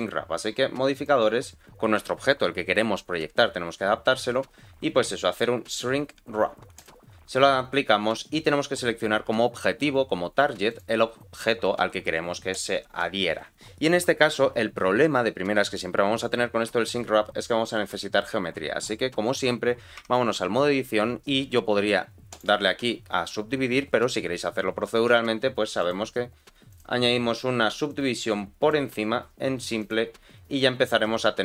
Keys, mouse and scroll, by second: 0.9-6.8 drag, 10.7 click, 20.0 Tab, 22.3-24.7 right drag, 25.1 Tab, 25.8-26.8 drag, 27.8 click, 29.8 click, 30.9-31.4 scroll up 1.